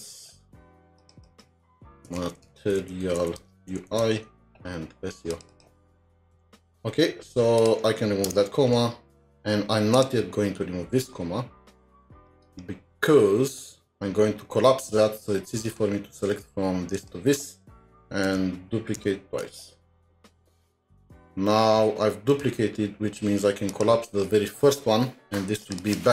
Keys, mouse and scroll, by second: 0.0-0.7 typing, 1.2 double click, 2.1-3.7 typing, 4.8-6.8 typing, 5.5 double click, 8.3 typing, 8.9-9.5 scroll down 1, 11.0 scroll up 1, 18.3 alt+shift+Down, 19.0 alt+shift+Down, 20.2-20.7 scroll up 3, 20.7-21.4 scroll up 9, 25.8-26.1 scroll up 10.